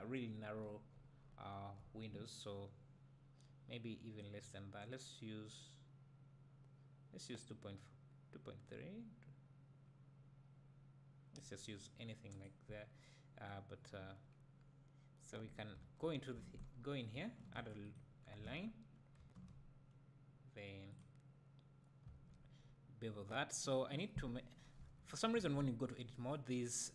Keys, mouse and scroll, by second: 0.9-1.3 scroll down 1, 1.3 `, 4.2-11.5 drag, 12.3 click, 15.7 Tab, 17.1 ctrl+r, 17.9-19.2 right drag, 19.2 ctrl+b, 21.0 click, 22.1 Tab.